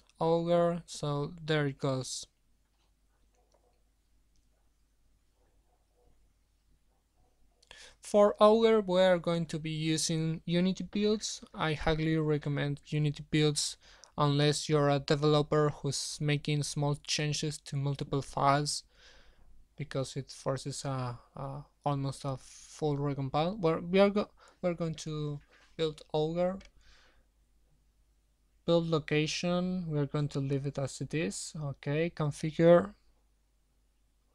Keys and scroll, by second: 16.0 ctrl+c, 23.1 ctrl+v, 26.0 ctrl+v, 26.7 shift+Left, 26.9 shift+Left, 27.1 shift+Left.